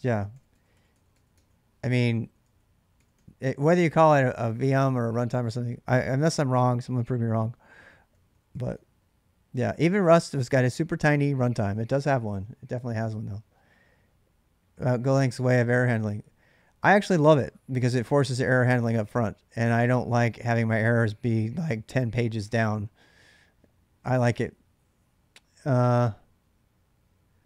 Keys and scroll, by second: 0.1-3.0 typing, 7.9 k, 8.1 k, 8.6 k, 8.8 k.